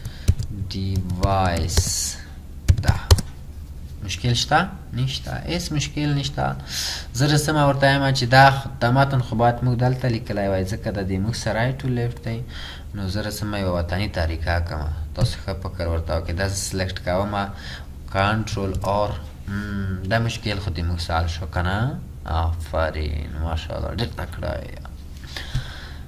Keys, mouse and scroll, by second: 0.0-3.4 typing, 18.8 ctrl+ق.